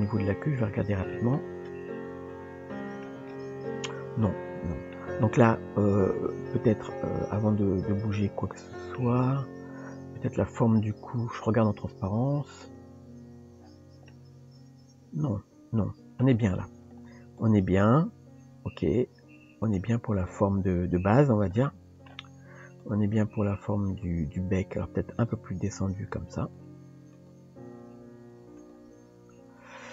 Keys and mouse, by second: 1.1 shift+middle click, 1.8 KP_1, 2.7 shift+middle click, 4.9 shift+middle click, 6.4 KP_1, 6.9 KP_3, 8.2 shift+middle click, 12.6 click, 14.1-16.3 shift+middle drag, 17.4 click, 20.3 click, 21.6 shift+middle click, 22.8 click, 24.7 r, 25.4 g, 27.1 click.